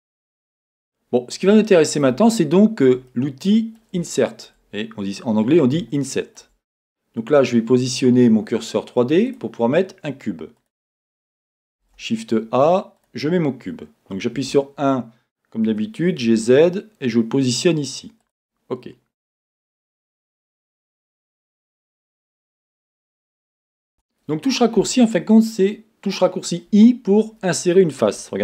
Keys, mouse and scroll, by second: 5.3-6.0 scroll down 2, 7.3 click, 9.3 click, 10.6 click, 11.8 shift+a, 14.5-21.4 drag, 14.5 KP_3, 21.4-25.0 middle drag, 23.2-23.9 scroll up 2, 23.9 scroll up 1, 23.9 Tab, 25.0 click.